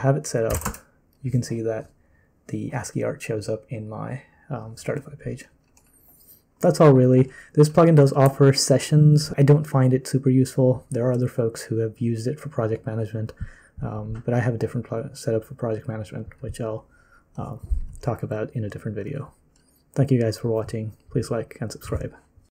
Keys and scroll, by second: 0.0-1.0 typing.